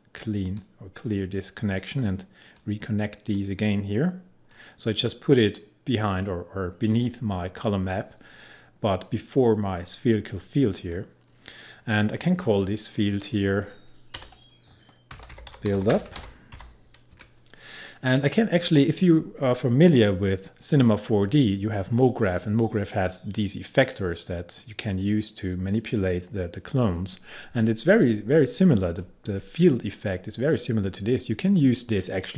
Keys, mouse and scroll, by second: 10.8 click, 13.3 click, 14.2 Return, 14.9-16.6 typing, 18.7-20.6 scroll down 1.